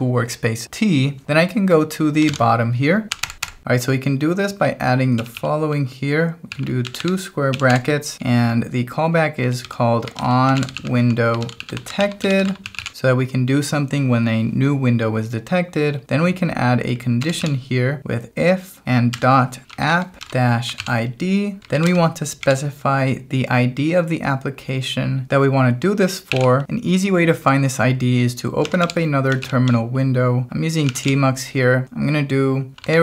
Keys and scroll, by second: 2.3 shift+g, 3.2 o, 3.3 Return, 5.2 [, 6.2-8.1 typing, 9.1-13.3 typing, 16.9-17.9 typing, 19.2-22.5 typing, 26.0-27.1 typing, 28.6 ctrl+a, 28.8 m, 29.4 ctrl+j, 30.8 ctrl+a, 31.0 m, 32.5-33.0 typing.